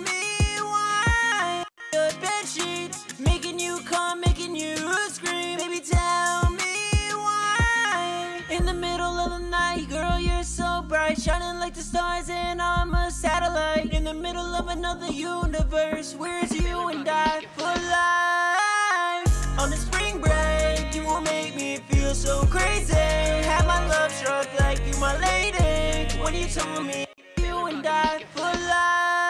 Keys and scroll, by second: 2.1 typing, 4.2 super+s, 4.5 super+Tab, 20.0 super+Tab, 21.5-21.9 typing, 23.8 ctrl+Down, 24.0 ctrl+Down, 28.5 alt+shift+s.